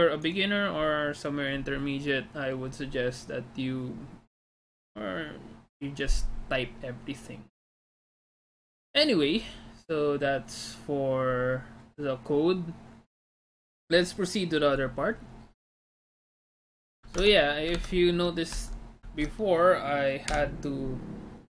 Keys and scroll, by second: 17.2 alt+Tab, 18.0 alt+Tab, 18.7 alt+Tab, 19.1 alt+Tab.